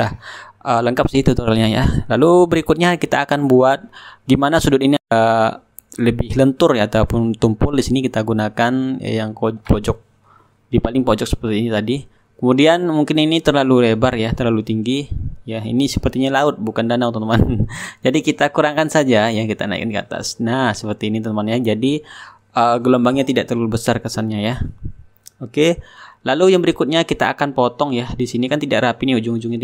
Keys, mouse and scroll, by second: 0.0-2.4 drag, 0.5 right click, 1.9 shift+right click, 2.4-4.2 middle drag, 4.5-7.7 drag, 8.5 click, 12.3 click, 14.0-22.9 drag, 14.4 right click, 23.1 click, 26.7-29.5 drag.